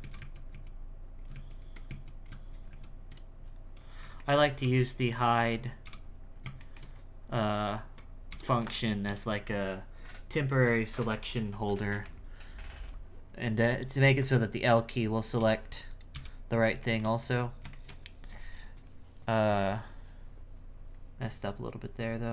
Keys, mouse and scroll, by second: 0.2 ctrl+z, 0.5 ctrl+z, 1.3 ctrl+shift+z, 1.9 ctrl+z, 2.5 ctrl+shift+z, 3.8-4.2 scroll up 1, 4.2 alt+middle click, 4.5 scroll up 1, 4.6 s, 5.2 alt+right click, 5.8 h, 6.0-6.6 scroll down 5, 6.6 shift+middle click, 6.9-7.6 scroll up 4, 7.6 alt+right click, 8.3 h, 8.8 scroll down 2, 9.1 l, 13.4-14.7 scroll down 1, 14.7 right click, 15.9 right click, 16.8 shift+middle click, 17.2-17.7 scroll up 1, 17.7-22.3 shift+middle drag.